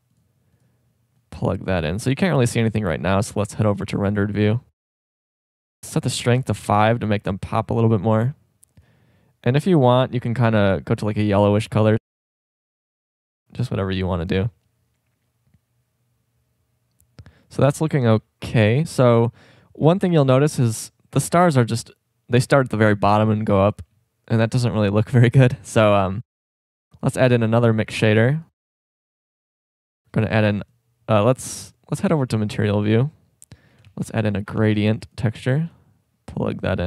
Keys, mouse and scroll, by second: 3.0-4.9 drag, 5.7-7.6 drag, 8.8-11.0 drag, 12.0 middle click, 25.6 middle drag, 25.8 click, 26.2-27.5 drag, 28.0 shift+d, 29.1 middle click, 30.4 shift+a, 32.0-32.8 drag, 34.3 click, 34.3 shift+a, 35.1-35.7 drag.